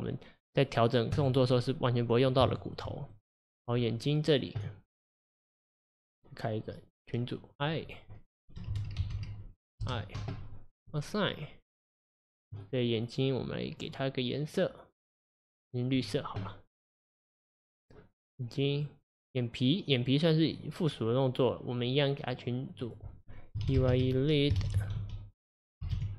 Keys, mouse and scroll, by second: 1.2-2.5 drag, 2.5-3.1 shift+middle drag, 3.1 drag, 6.7-10.6 drag, 10.9-11.7 drag, 12.3 click, 13.7-16.7 drag, 18.8 click, 19.1 click, 20.1-22.8 drag, 22.9-25.9 drag.